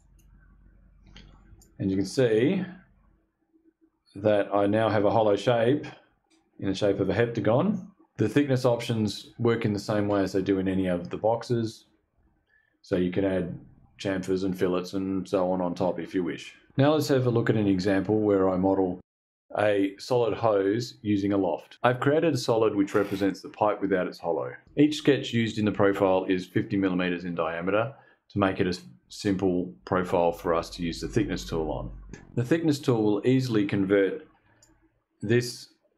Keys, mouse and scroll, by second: 1.0-8.1 shift+drag, 32.8 click, 34.1-35.9 shift+drag.